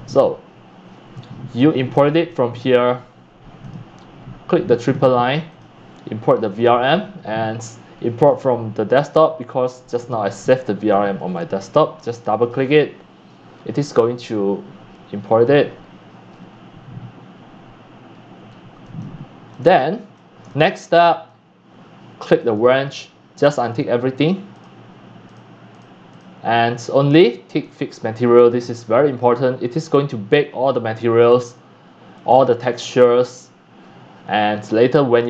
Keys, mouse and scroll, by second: 1.5-1.9 drag, 2.1 scroll down 1, 3.6 click, 4.8 drag, 5.5 click, 6.5 click, 6.7 click, 8.2 click, 12.4 click, 12.6 click, 15.2 click, 18.0 middle click, 18.1 scroll, 18.2 scroll, 18.3 scroll, 18.5 middle click, 18.5 scroll up 1, 19.0-19.5 drag, 19.7 shift+click, 20.5 click, 20.8 shift+right click, 22.5 click, 23.4 click, 24.2 click, 24.7 click, 25.5 click, 25.8-27.6 drag, 27.6-30.3 right drag.